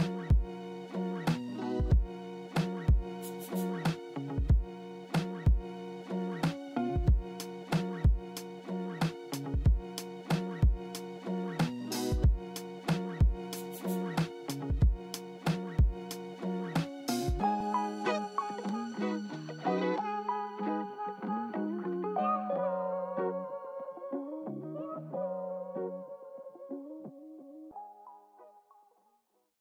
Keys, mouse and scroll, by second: 0.3-1.8 alt+middle drag, 1.9 alt+middle click, 15.3 double click, 15.8 double click, 16.0 alt+middle click, 21.1 alt+middle click, 28.6 right click.